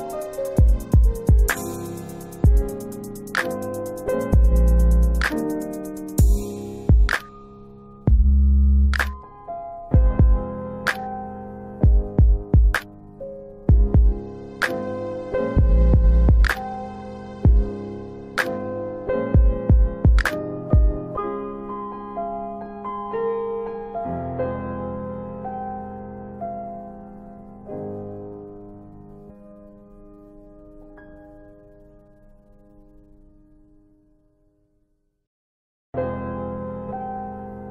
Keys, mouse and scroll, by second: 1.7 alt+w, 2.0 alt+w, 3.9 alt+x, 4.5 alt+middle click, 5.1 middle click, 5.1 scroll up 1, 5.6 alt+middle click, 6.2 alt+w, 6.6 alt+w, 7.1 middle click, 8.8 middle click, 8.9 click, 9.5 middle click, 13.8 ctrl+alt+w, 15.1 alt+w, 15.5 middle click, 16.5 middle click, 22.0 scroll down 1, 23.2 click, 28.1 shift+click, 29.2 middle click, 30.4 shift+click, 31.0 middle click, 33.7 middle click, 35.8 shift+click, 36.5 middle click.